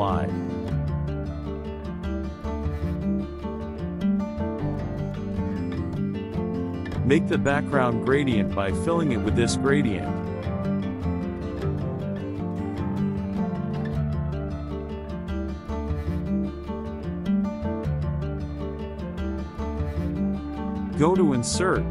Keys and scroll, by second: 1.2 KP_Subtract, 2.3 ctrl+a, 2.9 BackSpace, 5.9 KP_Add, 18.9 KP_Subtract.